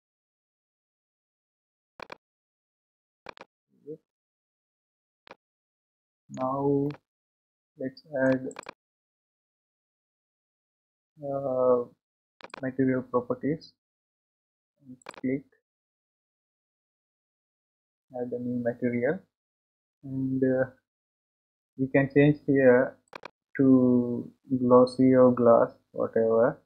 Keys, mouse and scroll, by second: 2.6 scroll down 2, 3.3 click, 3.8-4.7 scroll up 5, 5.2-6.4 shift+middle drag, 6.8-8.6 middle drag, 8.6 click, 12.7 click, 18.8 click.